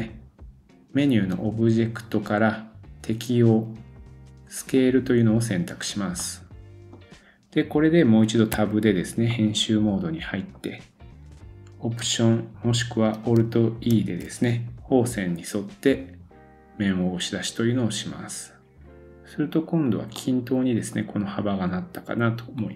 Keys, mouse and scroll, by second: 1.3-20.0 drag, 6.2 middle click, 8.6 Tab, 9.3 middle click, 13.9 alt+e, 20.0-22.7 middle drag, 22.5 scroll up 1.